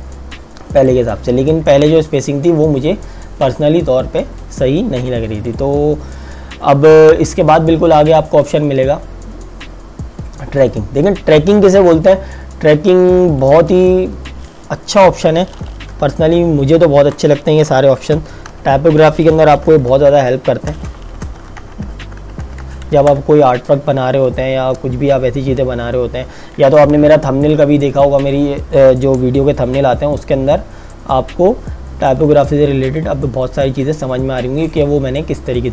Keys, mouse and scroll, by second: 0.9 click, 11.9 click, 16.2 t, 16.8 click, 17.8-22.9 typing, 23.0 KP_Enter, 25.1 click, 27.5 click, 31.1 click, 33.0 click.